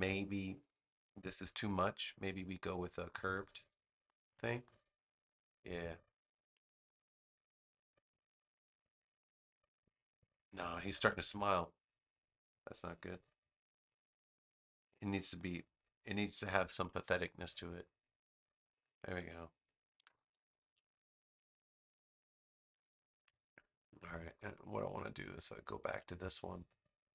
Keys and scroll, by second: 11.0 super+z, 19.9 super+-, 22.6 super+=, 23.9 space.